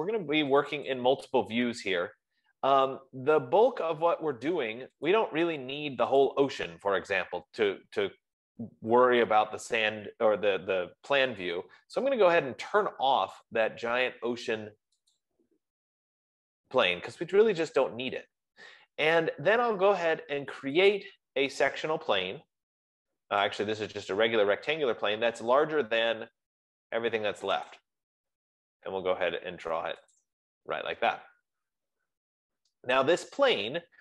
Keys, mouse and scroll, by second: 1.2 click, 1.8 click, 3.3-4.1 scroll, 4.1-4.5 scroll, 4.5 middle click, 4.7 middle click, 5.7 click, 6.8 click, 15.6-20.5 drag, 21.3-23.1 drag, 24.1 click, 28.1 click, 30.7 click.